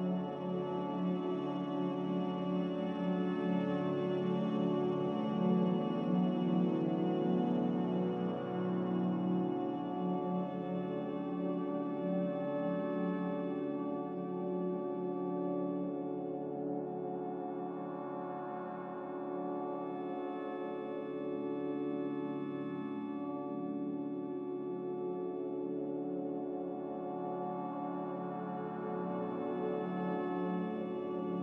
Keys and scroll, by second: 30.1-30.9 typing.